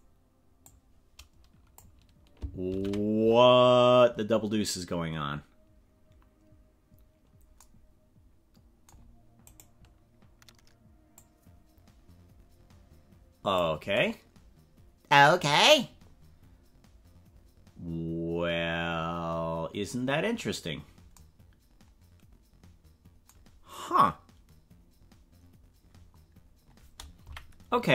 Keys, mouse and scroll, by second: 0.6-1.9 drag, 2.8 ctrl+z, 9.5 right click, 11.1-13.6 drag, 27.3 KP_Decimal.